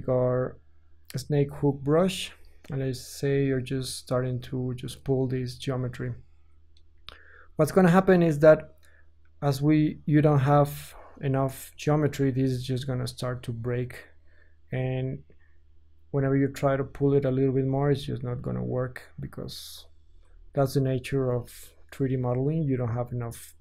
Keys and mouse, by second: 0.3 click, 1.8-23.4 drag, 17.8 ctrl+z, 21.0 Tab.